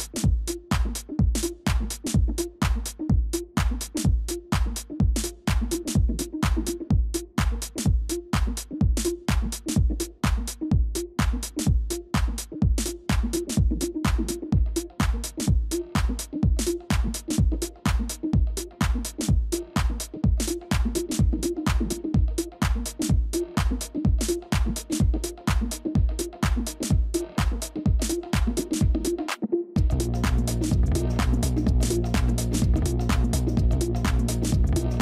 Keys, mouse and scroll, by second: 2.1-3.0 scroll up 1, 3.9-5.7 scroll down 1, 5.7-8.7 scroll up 1, 9.4 double click, 29.8 Delete, 32.0 Delete.